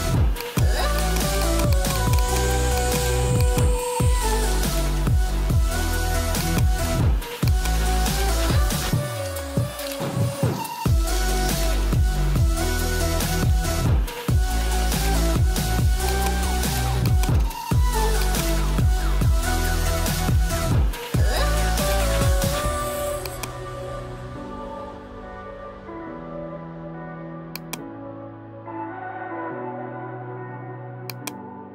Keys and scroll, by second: 4.3 ], 15.2 ], 17.8 [.